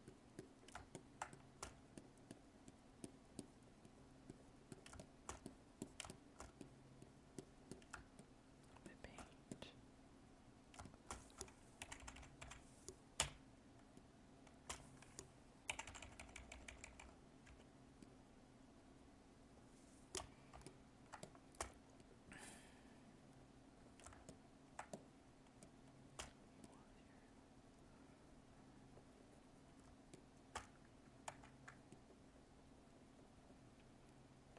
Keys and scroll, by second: 0.7 alt+space, 7.9 alt+space, 20.5 alt+space, 24.1 alt+space, 29.8 alt+space, 31.2 ctrl+z.